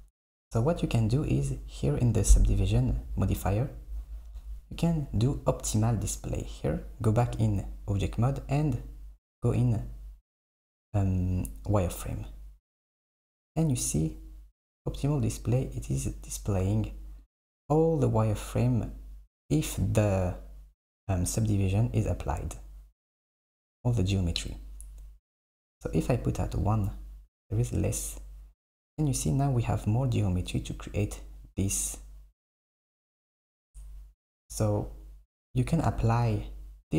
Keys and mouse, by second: 6.4 click, 7.3 Tab, 10.3 click, 15.5 click, 16.0 click, 16.9 click, 17.3 click, 23.9 click, 24.6 click, 26.6 click, 27.3 KP_1.